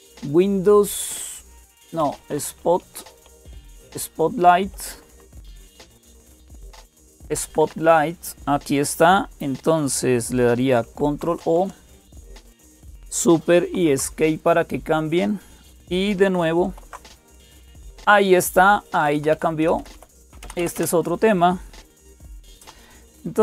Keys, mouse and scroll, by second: 0.0-23.4 typing, 4.7 Delete, 4.9 Delete, 5.1 Delete, 5.2 Delete, 7.1 Left, 7.4 Left, 7.6 Left, 10.6 Left, 13.5 ctrl+o, 13.5 Return, 16.4 super+Escape, 16.4 alt+s, 19.1 alt+super+d, 19.6 Down, 19.7 Down, 20.0 Down, 20.2 Up, 20.4 Up, 20.5 Up, 22.0 Down.